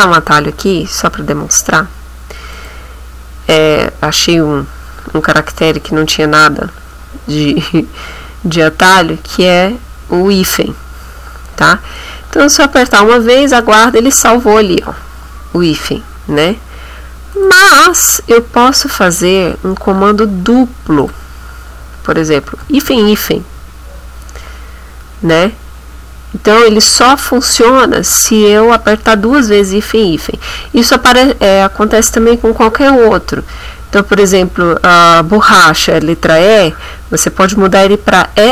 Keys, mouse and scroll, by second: 2.5 click, 10.3 -, 17.3 click, 17.9 click, 21.0 click, 22.6 -.